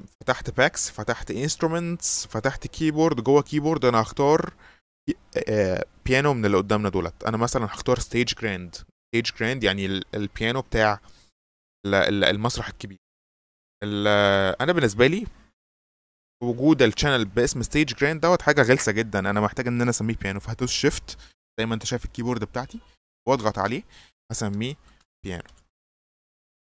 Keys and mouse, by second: 1.4 click, 7.7-9.4 drag, 23.3 shift+click, 24.7-26.6 typing.